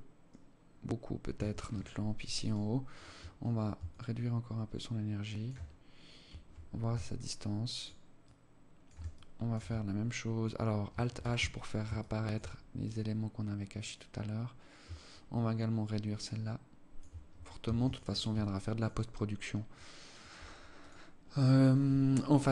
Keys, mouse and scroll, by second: 0.7 Escape, 1.8 right click, 2.3 right click, 3.2 shift+click, 5.3 scroll down 2, 6.5 shift+click, 7.6 shift+click, 8.5 alt+click, 9.0-9.4 scroll down 5, 9.4-9.7 scroll up 6, 10.6 alt+h, 11.4 alt+shift+click, 12.2 right click, 14.4 shift+click, 17.0 ctrl+s, 17.8 alt+click, 19.2 alt+click, 20.2 right click, 21.6 alt+click, 22.2 alt+shift+click.